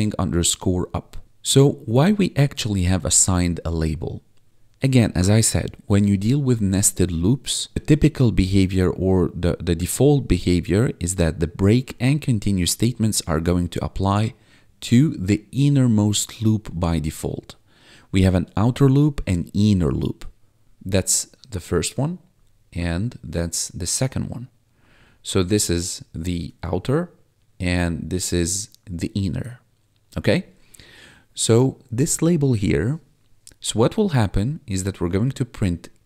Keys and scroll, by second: 20.6 2.